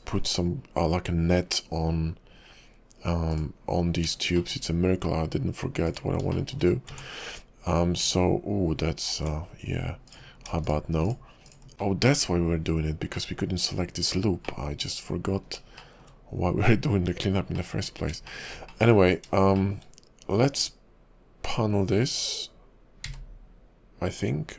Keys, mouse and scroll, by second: 3.4 click, 3.9-4.6 scroll up 3, 4.6 shift+middle click, 5.9 click, 6.3 shift+middle click, 6.7 scroll up 2, 6.9 Tab, 8.0 Tab, 10.1 alt+click, 10.6 alt+shift+click, 11.0 alt+shift+click, 11.4 alt+shift+click, 11.7 middle click, 11.7 scroll down 3, 11.8 middle click, 13.1 middle click, 14.5 middle click, 15.8 shift+middle click, 15.8 shift+middle click, 17.6 middle click, 17.9 scroll up 2, 18.3 shift+middle click, 18.7 middle click, 19.0 scroll down 2, 19.5 shift+middle click, 23.1 q.